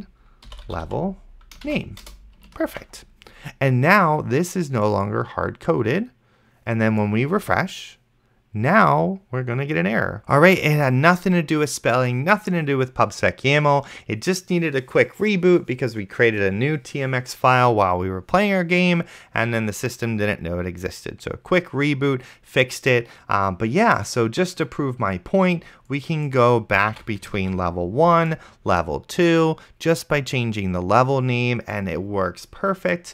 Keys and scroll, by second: 0.0-2.0 typing, 2.1 Return, 3.0 ctrl+s, 27.2 1, 27.7 ctrl+s.